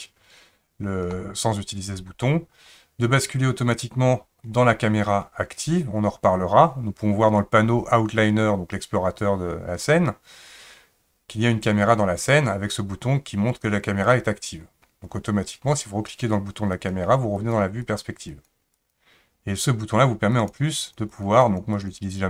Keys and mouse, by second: 3.6 click, 16.8 click, 17.3 click, 17.8 click, 18.3 click, 18.7 click, 20.3 click, 20.8 click, 21.1 click, 21.4 click, 21.7 click, 22.0 click.